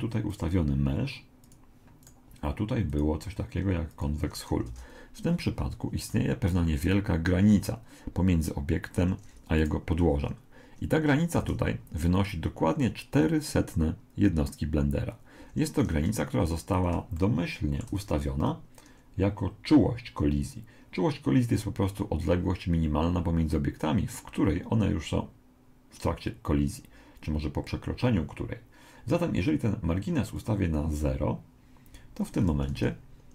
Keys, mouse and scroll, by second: 2.1 right click, 2.9 click, 4.7 alt+a, 6.1 middle click, 8.3 middle click, 8.9 Escape, 9.6 right click, 11.4 alt+a, 15.4 Escape, 16.1-18.8 middle drag, 30.3 click, 32.7 alt+a.